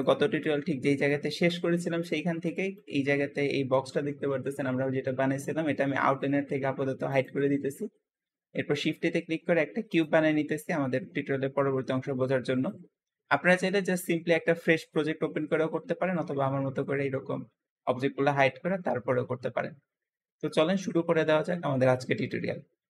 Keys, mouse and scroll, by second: 0.5-0.9 scroll down 2, 0.9-2.0 middle drag, 2.0-2.3 scroll up 2, 2.3 middle click, 2.8-3.9 scroll up 2, 3.9-5.9 scroll down 3, 7.0 click, 7.9-8.5 scroll down 3, 8.7 shift+a, 8.7 shift+a, 10.3-11.8 scroll up 3, 11.8 scroll up 1, 12.0-12.8 middle drag, 12.8-13.4 scroll down 5, 13.4-15.8 middle drag, 15.8-16.5 scroll up 3, 16.5-19.0 scroll up 1.